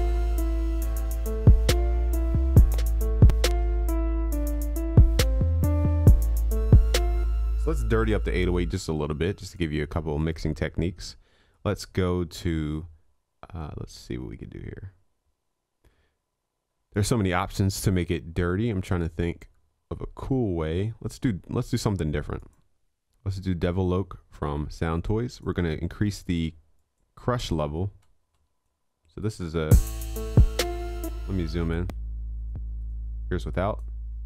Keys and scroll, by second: 4.1 ctrl+s.